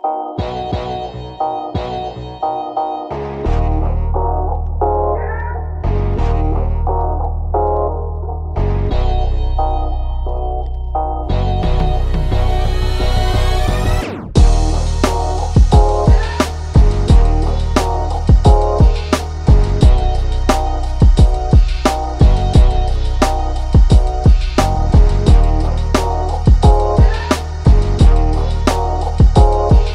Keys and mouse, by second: 12.9 right click, 15.9 click, 17.3 shift+click, 18.1 right click, 19.4 click, 20.8 click, 21.8-23.6 shift+drag, 24.6 click, 27.0 click, 27.9-29.9 drag.